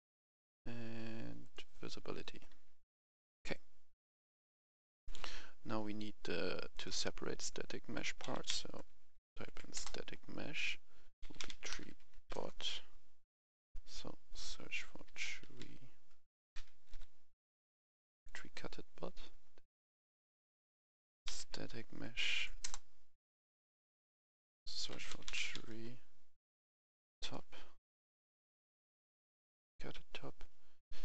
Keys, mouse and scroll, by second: 0.1-0.7 scroll down 1, 1.4 click, 2.1-4.3 right drag, 4.3-4.7 scroll up 1, 4.9 F11, 5.0 F10, 6.7 click, 8.0-9.4 typing, 9.7 Return, 11.2-12.2 typing, 12.3 Return, 13.7-14.3 scroll up 1, 14.3 click, 15.0-16.8 typing, 18.1 click, 20.9-21.4 typing, 22.1 Down, 22.3 Down, 22.6 Return, 24.0 click, 25.1-25.5 typing, 27.0 typing, 28.4 click.